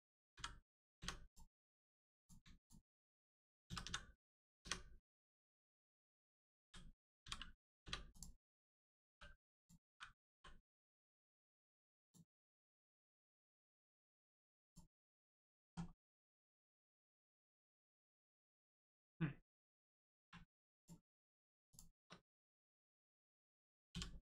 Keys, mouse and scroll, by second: 0.3 y, 0.9 0, 1.2 click, 2.5 shift+click, 3.6 s, 4.5 0, 5.2 right click, 8.1 click, 10.9 l, 10.9 right click, 11.9 click, 12.8 scroll down 1, 13.1 shift+middle click, 13.5 scroll up 1, 13.9 shift+middle click, 14.3 scroll up 1, 14.6 click, 15.9 middle click, 16.3 scroll up 1, 16.6 shift+middle click, 20.7 click, 21.7 shift+click, 23.9 j.